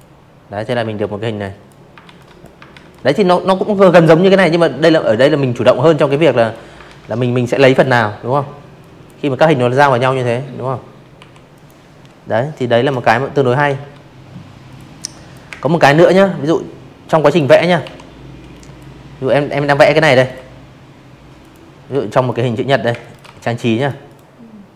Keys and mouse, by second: 1.3 ctrl+z, 3.0 click, 3.8 ctrl+z, 4.5 v, 4.6 click, 5.8 click, 8.1 Delete, 8.5 click, 10.7 ctrl+z, 11.6 click, 11.9 click, 12.4 space, 12.6 click, 12.8 v, 13.0 click, 14.0 drag, 14.8 Delete, 15.5 click, 16.8 space, 16.9 click, 17.1 v, 17.2 click, 18.3 click, 18.8 m, 19.2 click, 19.8 space, 20.0 click, 20.2 v, 20.7 click, 21.0 click, 21.8-23.2 drag.